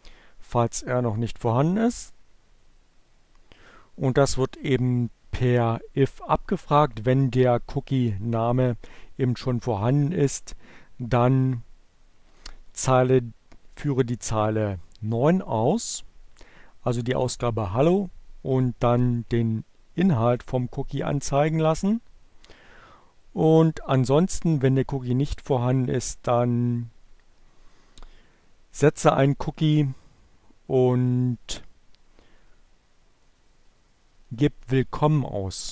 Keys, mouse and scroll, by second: 11.8 click, 32.6 click, 34.9 click.